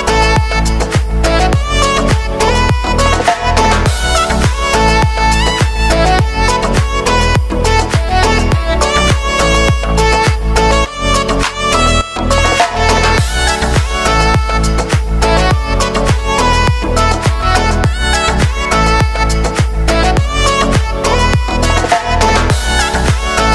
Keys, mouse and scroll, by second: 4.6 click, 7.0 click, 9.9 space, 13.9 u, 15.0-17.5 drag, 17.5 space, 18.8 click, 19.9 space, 22.6 space.